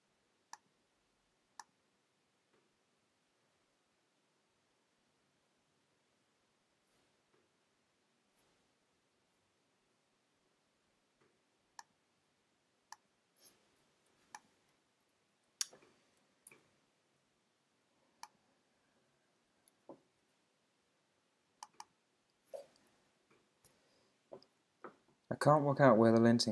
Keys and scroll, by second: 15.0 super+`.